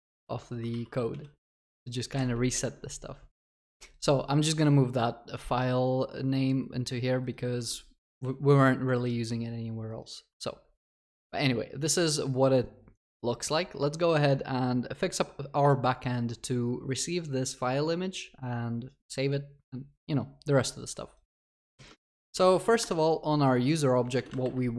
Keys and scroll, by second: 0.2 ctrl+x, 0.7 ctrl+w, 1.7 ctrl+s, 2.5 ctrl+y, 21.8 ctrl+shift+n, 22.8 ctrl+shift+n.